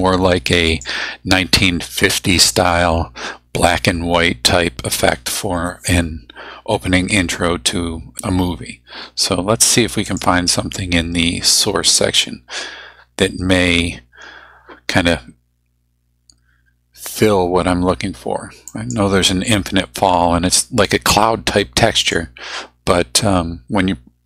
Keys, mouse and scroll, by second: 0.7 click, 10.1 click, 18.7 click, 22.0 click.